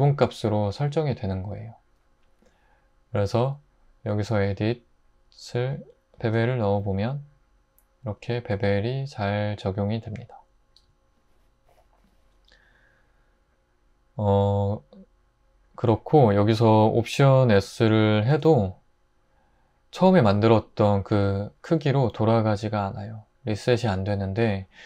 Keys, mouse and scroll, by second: 4.2 Tab, 6.2 super+b, 10.8 Tab, 18.3 alt+s.